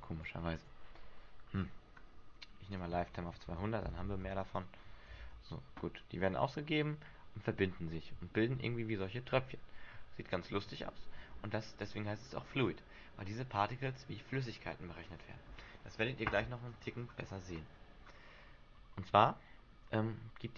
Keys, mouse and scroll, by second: 0.4 click, 1.6-2.9 scroll up 7, 2.9 click, 5.3 alt+a, 8.1 middle click, 11.4 alt+a, 11.6 middle click, 12.6 middle click, 17.0-17.9 scroll down 5, 18.0-19.6 scroll down 2, 19.6 scroll down 1.